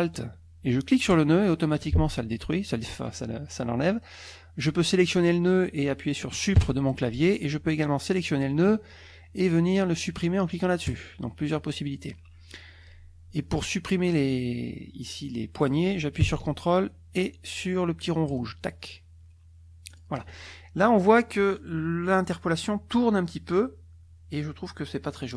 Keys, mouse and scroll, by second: 1.1 ctrl+alt+click, 4.0-5.3 drag, 6.6 Delete, 7.8 click, 10.9 click, 13.6-15.9 drag, 18.3 ctrl+click, 19.9 ctrl+click.